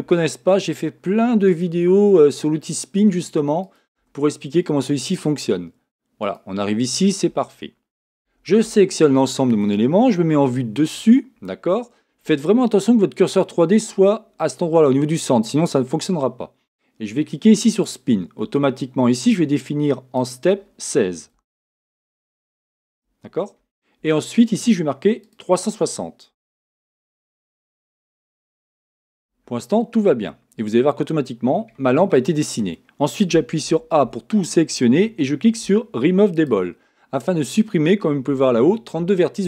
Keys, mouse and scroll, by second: 0.1 e, 1.7 e, 4.0 e, 8.2 a, 8.6 a, 10.4 a, 10.4 7, 17.9-19.5 drag, 20.2-22.0 drag, 25.2-27.0 drag, 30.3-32.0 middle drag, 33.6 a, 34.0 a, 36.3-38.3 drag.